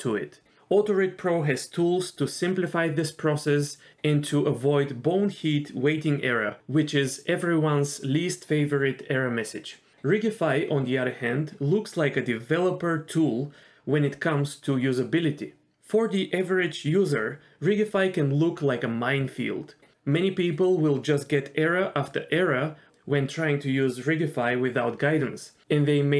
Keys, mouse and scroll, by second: 0.5 middle click, 0.6 ctrl+z, 0.7 middle click, 1.0 middle click, 1.4-15.7 drag, 17.6 middle click.